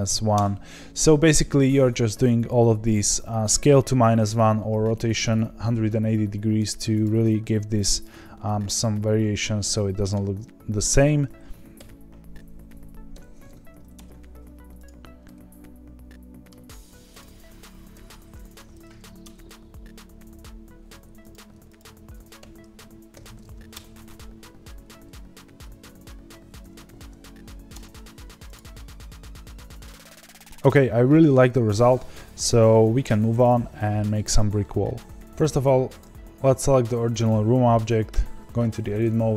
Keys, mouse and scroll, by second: 7.0 click, 7.2-10.1 middle drag, 10.1-10.9 scroll down 1, 10.9 click, 11.8 r, 14.8 click, 15.2-17.1 middle drag, 17.1 click, 17.9 r, 21.3 x, 21.7 click, 22.4 r, 25.6 s, 28.5 click, 28.7-35.9 middle drag, 35.9 click, 38.1 Tab, 39.0 3.